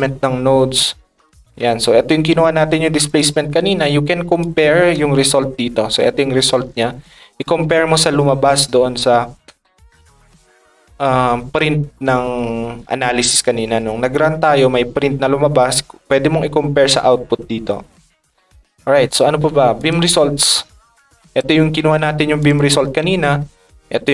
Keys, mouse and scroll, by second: 1.2 click, 2.9 click, 3.1 click, 4.4 click, 19.7 click, 21.2 click, 22.4 click, 22.5 click, 24.0 click.